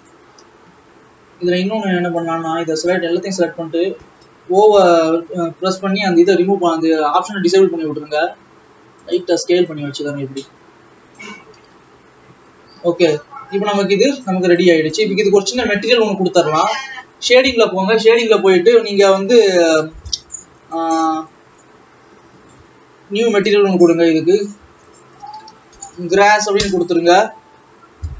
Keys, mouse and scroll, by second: 0.1 ctrl+click, 0.4 ctrl+s, 1.0 Tab, 1.8 click, 2.6 click, 3.3 a, 3.4 scroll down 3, 4.8 o, 7.8 s, 9.8 click, 12.0 ctrl+s, 12.7 Tab, 13.4 alt+a, 15.8 ctrl+s, 16.0 click, 20.4 click, 23.8-26.6 drag, 26.6 s.